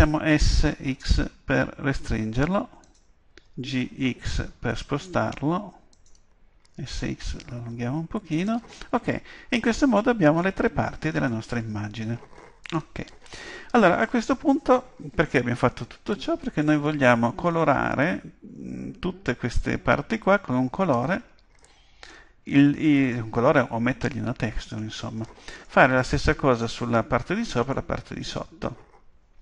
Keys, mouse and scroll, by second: 0.2 s, 3.0-4.7 drag, 3.4 g, 6.0-8.0 drag, 6.7 s, 8.5-10.3 drag, 12.6-14.6 drag, 21.6-23.5 middle drag, 24.8-27.5 middle drag, 27.7-29.4 middle drag.